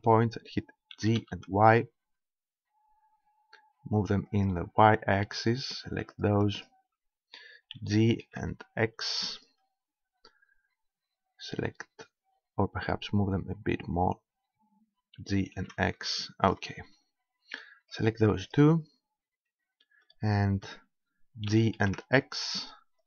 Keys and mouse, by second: 1.0 g, 4.4-6.4 drag, 6.2 middle click, 6.9-8.5 right drag, 7.8 g, 9.4-11.2 drag, 13.5 click, 15.2 g, 16.5-17.9 drag, 17.9 middle click, 20.2-21.5 drag, 21.5 g.